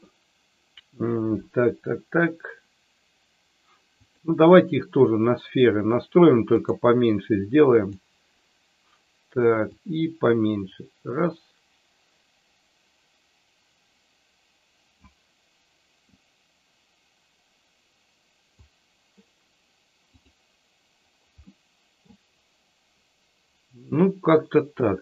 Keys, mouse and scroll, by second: 4.0-6.7 drag, 7.8 click, 9.7-15.3 drag, 16.0-18.6 drag, 20.2 click, 21.6 middle click, 24.7 middle click.